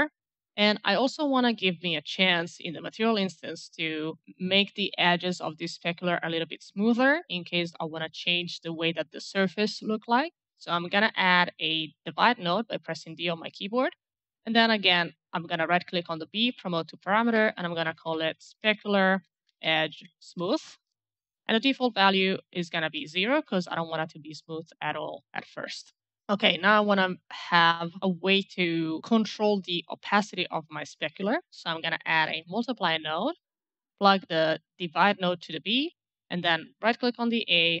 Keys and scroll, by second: 11.1 d, 11.6 d, 12.0 d, 17.5-20.7 typing, 22.7 KP_0, 22.8 Return, 31.7 m.